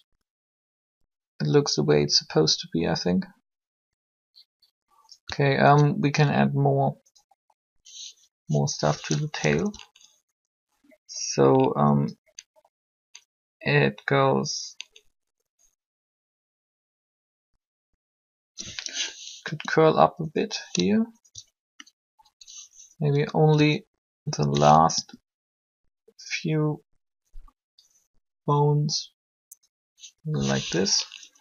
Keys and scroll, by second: 9.3 Up, 19.4 r, 24.9 ctrl+r, 31.2 Up.